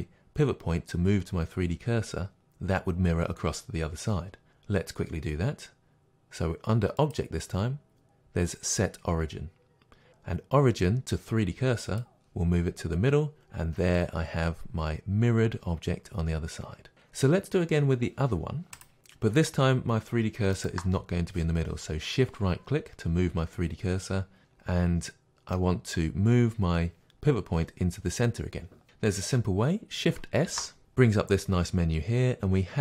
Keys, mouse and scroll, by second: 7.0-18.8 drag, 20.5 middle click, 20.6-24.4 shift+right drag, 24.4-32.8 middle drag, 30.5 shift+s.